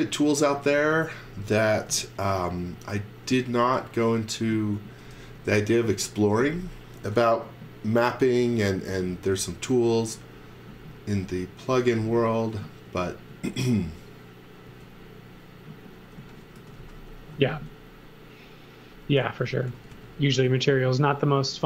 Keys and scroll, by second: 0.7 space, 1.9 m, 4.8 x, 5.1 v, 5.8 space, 6.8 space, 11.7-14.6 typing, 15.9-17.5 typing, 18.9-20.4 typing.